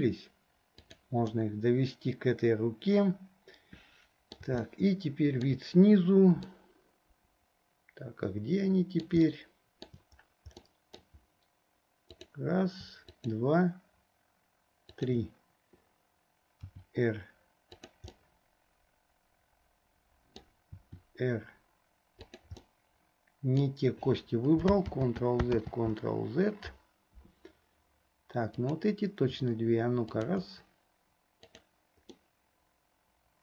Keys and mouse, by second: 1.4-4.6 middle drag, 4.8 shift+middle click, 6.8-9.3 middle drag, 9.4 shift+middle click, 10.8 click, 13.3 shift+click, 15.1 shift+click, 16.8 r, 18.2-20.5 drag, 19.1-20.5 right drag, 22.8-23.8 drag, 22.8-23.8 right drag, 25.1 ctrl+z, 25.8 ctrl+z, 30.1 shift+click, 31.6 click, 32.3-33.4 middle drag.